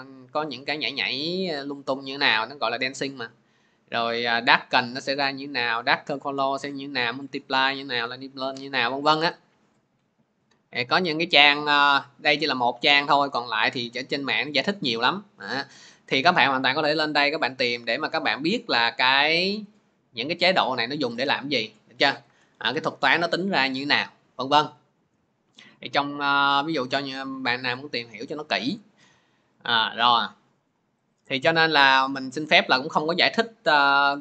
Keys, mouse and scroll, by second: 2.1 scroll, 2.9-3.3 scroll, 3.8 scroll, 4.7-5.3 scroll, 6.1-10.6 scroll, 10.7-16.3 middle drag, 10.7 scroll down 1, 10.7 scroll down 1, 10.9 scroll down 1, 10.9 scroll down 1, 11.2 scroll down 1, 11.2 scroll down 1, 11.2-12.4 scroll down 1, 12.4-13.3 scroll down 1, 13.3-16.3 scroll down 1, 21.0-24.7 drag, 24.7-26.6 scroll, 26.6-27.8 scroll up 28, 27.8 scroll, 27.9-29.0 scroll up 22, 29.0-29.8 scroll, 30.8 click, 30.8 scroll, 32.4 click.